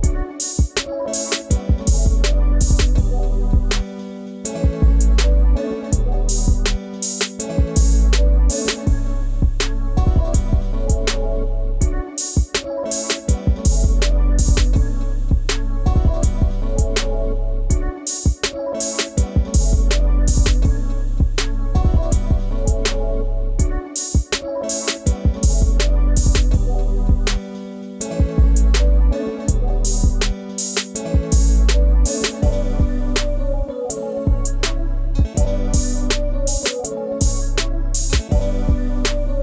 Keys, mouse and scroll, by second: 0.3 scroll, 0.5 space, 0.5 ctrl+click, 1.3-3.3 scroll, 4.7 space, 4.8 ctrl+click, 7.9 scroll down 1, 8.1 space, 8.2 ctrl+l, 9.0-9.4 scroll down 1, 9.4 space, 9.5 ctrl+click, 10.1 ctrl+scroll down 1, 10.7 space, 10.8 ctrl+click, 11.7 right click, 20.1 -, 34.1-34.5 scroll up 1, 35.1 ctrl+shift+p.